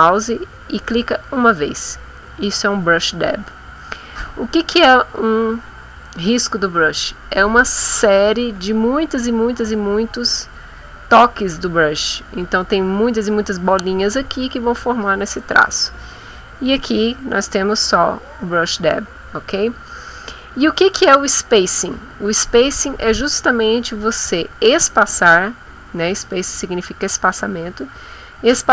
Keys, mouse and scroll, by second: 1.2 click.